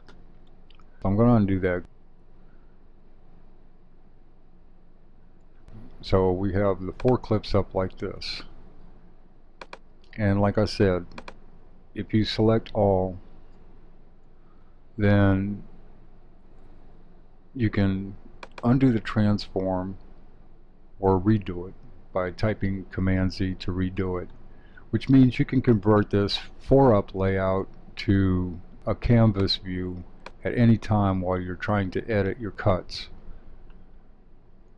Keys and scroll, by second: 2.2 super+z, 13.5 super+a, 22.0 super+z.